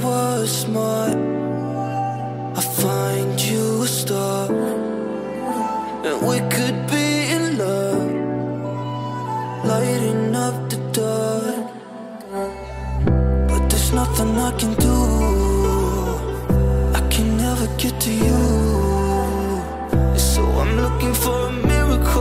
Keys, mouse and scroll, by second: 7.0 click, 16.7-17.2 drag.